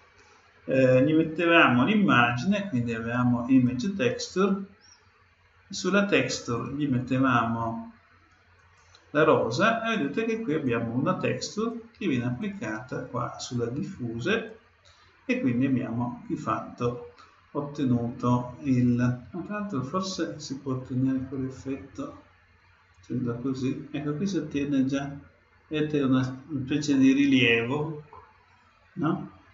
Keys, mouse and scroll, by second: 1.2-2.9 drag, 6.3-8.0 drag, 9.9-14.2 drag, 9.9-12.0 middle drag, 9.9-12.0 right drag, 20.0-24.9 drag, 24.8-29.2 middle drag.